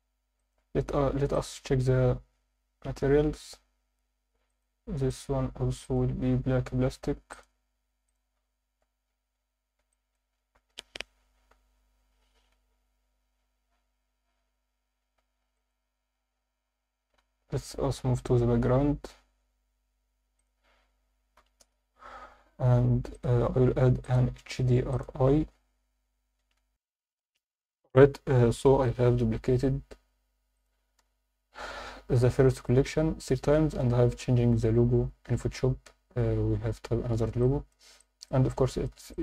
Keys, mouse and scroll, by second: 0.4 alt+shift+middle drag, 2.1 click, 4.5 click, 5.1 click, 5.8 click, 7.3 click, 8.7 alt+a, 9.2 scroll down 2, 9.9-10.3 alt+shift+middle drag, 15.5 click, 20.4-21.6 drag, 23.1 click, 24.0-25.0 drag, 26.6 F9, 26.7 F10, 30.5 click, 31.0 KP_0, 31.7-32.2 scroll up 3, 37.4 alt+middle click, 38.0 alt+shift+middle drag, 38.5-38.9 ctrl+alt+middle drag, 39.1 alt+shift+middle click.